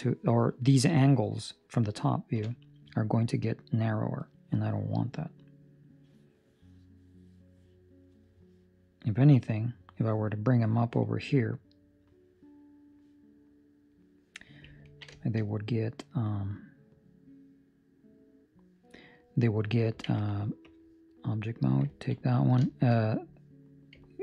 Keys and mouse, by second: 1.1 middle click, 2.3 KP_7, 4.6 middle click, 11.0 middle click, 14.8 ctrl+middle click, 15.5 shift+middle click, 18.9 right click, 20.0 ctrl+Tab, 21.4 right click, 21.8 ctrl+middle click, 22.1 middle click, 22.5 shift+middle click, 23.0 middle click, 23.5 middle click, 23.9 ctrl+middle click.